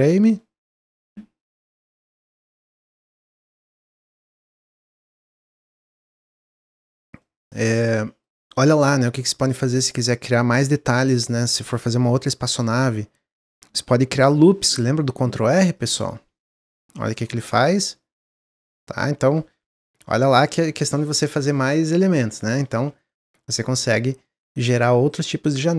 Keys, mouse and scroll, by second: 0.0 click, 0.3 middle click, 0.6-1.0 scroll up 2, 1.0-2.2 middle drag, 2.2-4.7 shift+drag, 4.7 middle click, 5.6 Tab, 5.8-7.5 middle drag, 7.5 Tab, 7.7-9.1 middle drag, 9.1 Tab, 10.8 3, 11.0 click, 12.0 click, 12.6 s, 14.0 ctrl+r, 16.1 s, 17.0 Tab, 17.3-17.6 middle drag, 17.6 click, 17.9-21.0 middle drag, 22.4-25.4 middle drag.